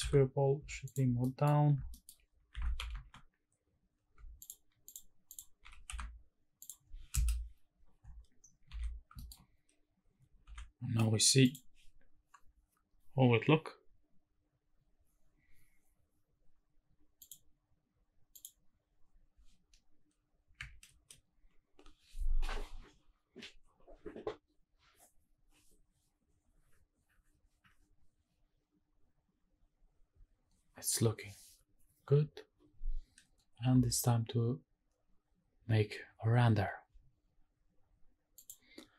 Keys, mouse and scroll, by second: 0.0 z, 0.9 shift+click, 1.2 middle click, 1.7-2.1 scroll up 2, 1.9 shift+middle click, 2.9 shift+`, 4.9 click, 5.3 click, 5.6 g, 5.9 z, 6.6 click, 7.1 KP_0, 7.7-9.1 scroll down 7, 8.7 ctrl+s, 9.2 shift+middle click, 9.4-10.3 scroll up 1, 10.5 ctrl+s, 11.9 click, 18.3 click, 20.9 ctrl+space, 38.5 click.